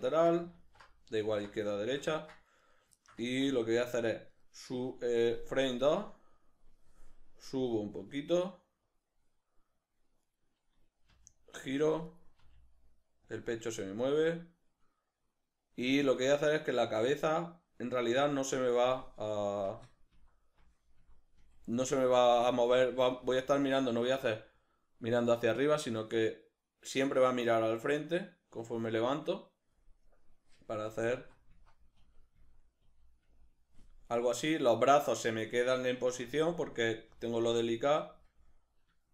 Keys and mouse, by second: 0.5 alt+q, 1.8 shift+middle click, 2.2 shift+middle click, 2.6 right click, 3.0-4.4 ctrl+shift+middle drag, 4.4 right click, 5.8-9.0 drag, 7.6 g, 10.3 right click, 11.1 r, 11.8 click, 12.1 right click, 12.4 r, 13.4 click, 13.8-16.2 shift+middle drag, 16.2 right click, 16.8 r, 17.6 click, 19.6 Left, 20.2 Right, 20.6 Left, 21.0 Right, 21.4 Left, 21.8 Right, 22.3 Left, 22.7 Right, 23.2 Left, 30.9 Left, 31.2 Right, 32.0 Left, 32.4 Right, 32.8 Left, 33.2 Right, 36.2 Left, 36.6 Right, 37.1 Left, 37.5 Right, 38.1 Left, 39.0-39.1 shift+middle drag.